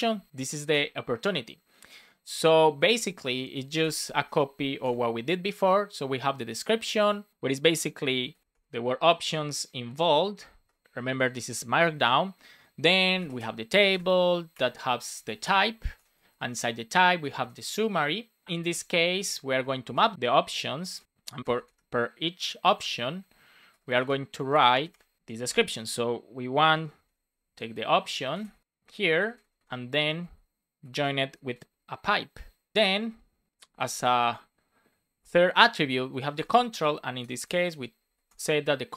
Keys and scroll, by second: 0.6 Return, 1.5 Return, 4.5 shift+;, 4.7 space, 7.3 BackSpace, 8.2 shift+8, 9.3 Right, 10.6 BackSpace, 10.8 Return, 11.1 Up, 11.4 super+Right, 11.8 Down, 13.7 shift+;, 13.8 shift+space, 14.0 shift+[, 14.4 Return, 15.5 Return, 15.7 shift+;, 15.9 space, 16.2 shift+[, 16.5 Return, 17.5 Return, 18.4 shift+;, 18.6 shift+space, 20.1 super+z, 21.0 shift+9, 22.6 space, 23.2 shift+/, 23.6 BackSpace, 24.6 shift+., 24.8 space, 25.4 space, 25.6 Left, 26.5 shift+4, 26.8 shift+[, 27.4 Left, 28.4 Left, 29.0 Right, 30.5 Right, 31.4 shift+9, 36.1-38.9 typing.